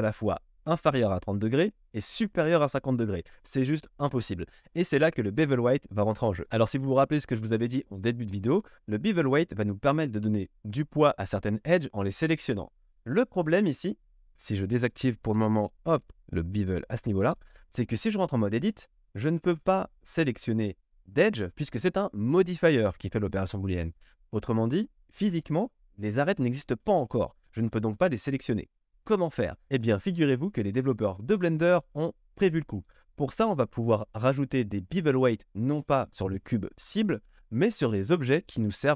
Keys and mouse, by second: 1.5-16.4 drag, 16.4-19.4 middle drag, 17.9 Tab, 19.4 q.